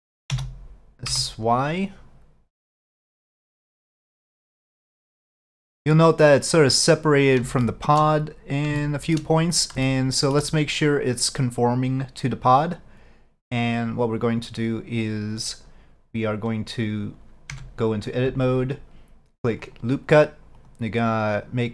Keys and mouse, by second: 0.4 s, 7.7-8.1 shift+middle drag, 8.9-9.2 shift+middle drag, 9.9-10.4 shift+middle drag, 12.0-13.6 drag, 17.6 Tab, 19.7 click, 20.6 click, 21.5 click.